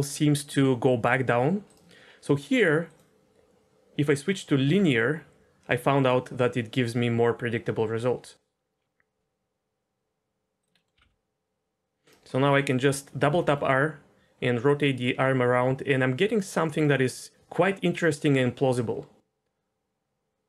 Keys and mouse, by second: 2.8-4.2 drag, 4.6 r, 10.8 middle click, 10.9 r, 11.0 r, 12.3-12.6 middle drag, 13.3 r, 13.5 r.